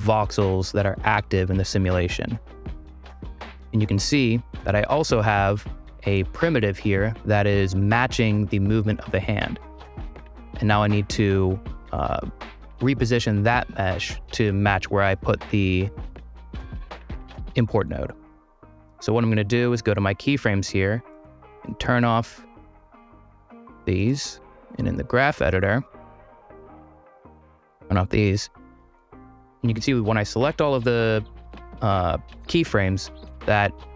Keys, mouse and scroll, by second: 0.8 space, 0.9 ., 2.5 space, 5.6 click, 6.1 click, 17.0 click, 20.2 click, 20.7 click, 21.6 click, 23.6 click, 24.8 click, 26.4 click, 26.7 click, 27.0 click, 27.8 click, 32.9-33.9 drag.